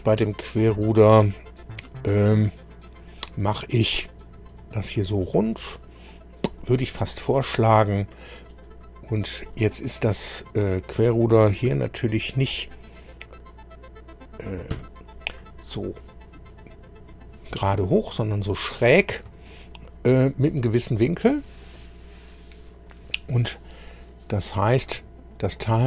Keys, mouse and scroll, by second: 0.4-1.0 shift+scroll up 3, 1.2-2.5 middle drag, 7.3-7.6 scroll down 2, 7.7 middle click, 9.5-11.0 middle drag, 11.7 KP_1, 14.7 KP_2, 18.9 scroll down 2, 19.5-20.7 shift+middle drag, 21.5 scroll down 2.